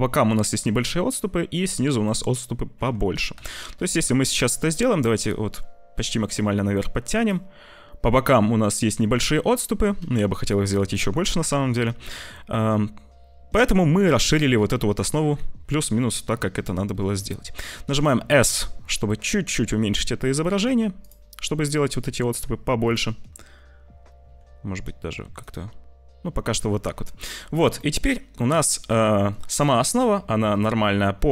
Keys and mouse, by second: 3.0 g, 14.0-15.1 middle drag, 15.2 `, 18.0 s, 22.0 g, 24.1 s, 26.6 middle click, 27.8-29.2 middle drag, 29.5-31.3 middle drag.